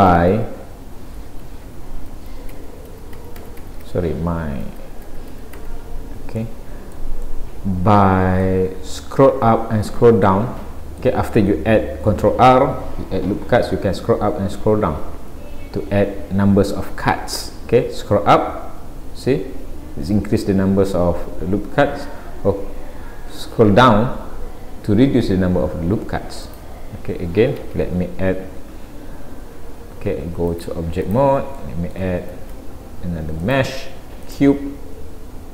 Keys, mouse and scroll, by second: 0.0 z, 2.1 ctrl+z, 4.7 ctrl+z, 6.0 scroll down 2, 6.4 middle click, 7.3 middle click, 9.1-10.1 scroll up 4, 10.3 middle click, 15.4 ctrl+r, 28.6-29.4 scroll down 2, 30.5 click, 30.5 scroll down 1, 31.6 middle click, 32.4 shift+a.